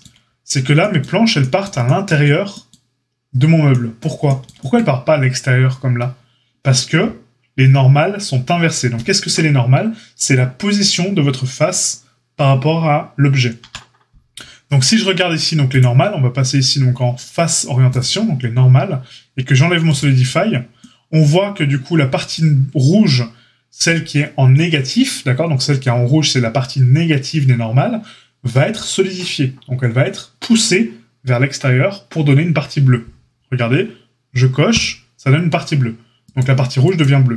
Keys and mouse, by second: 13.6 KP_Divide, 15.8-19.9 drag, 19.9-34.7 middle drag, 34.7 click, 34.7-36.2 middle drag, 36.2 click, 36.3 middle click, 36.8 click, 36.9 middle click, 37.3 click.